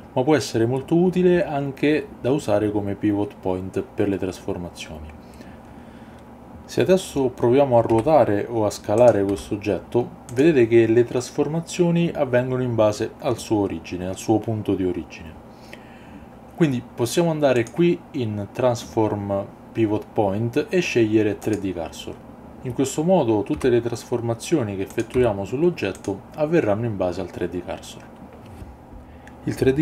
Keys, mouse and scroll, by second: 7.9 r, 9.0 click, 9.3 s, 10.3 click, 17.6-21.6 drag, 22.2 ctrl+z, 24.9 click, 25.2 s, 26.0 click.